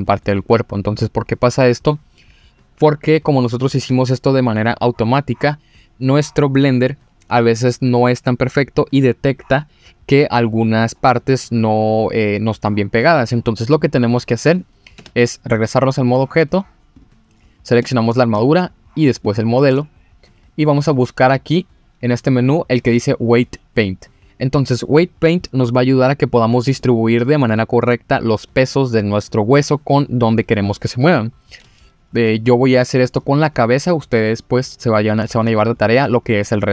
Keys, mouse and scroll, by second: 14.6 click, 14.9 Tab, 15.9-16.5 drag, 16.9 click, 17.8 click, 19.2-19.7 shift+drag, 20.4-23.4 drag, 33.0 click.